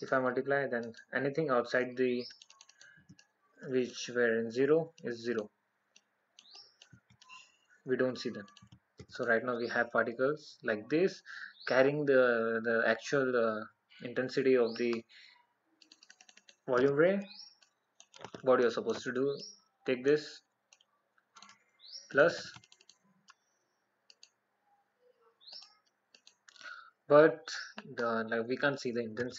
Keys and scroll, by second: 19.8 alt+?.